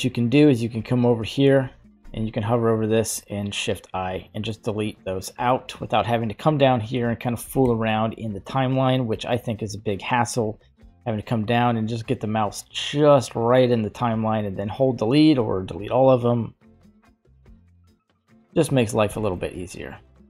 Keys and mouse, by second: 3.1 shift+i, 7.6 shift+Left, 9.0 middle click, 10.6 middle click, 16.8-17.7 middle drag, 18.1-18.4 shift+middle drag, 19.1 shift+middle click.